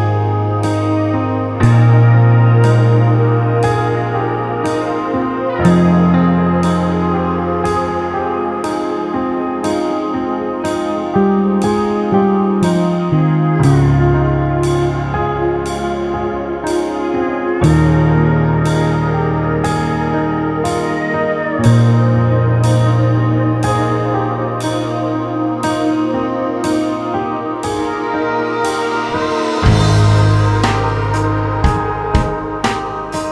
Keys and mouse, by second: 1.1 s, 1.5 w, 3.1 w, 6.8 click, 11.5 middle click, 13.4 middle click, 24.7-26.8 drag, 30.4-33.3 drag.